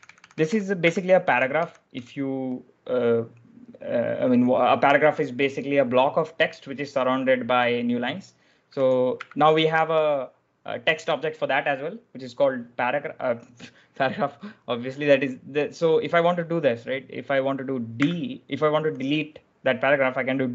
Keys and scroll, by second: 0.0-1.8 typing, 8.6-9.0 typing, 17.9 d, 20.4 i.